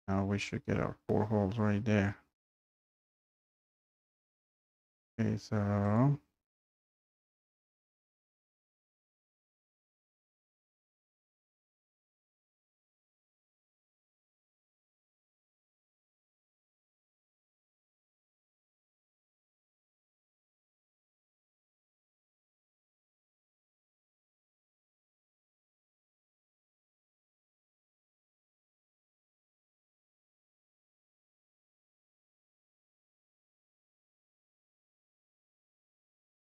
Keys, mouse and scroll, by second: 7.0 Escape, 7.5-10.6 typing, 7.5 Escape, 11.8-14.6 typing, 14.9 Return, 15.4 Delete, 17.9-20.5 typing, 20.9 Right, 21.0 Right, 21.1 Down, 23.7 Delete, 24.4 Delete, 25.6 Escape, 27.4-28.6 typing, 28.8 click, 29.2 click, 31.1 click, 32.4 e, 33.0 click, 33.8-36.4 typing.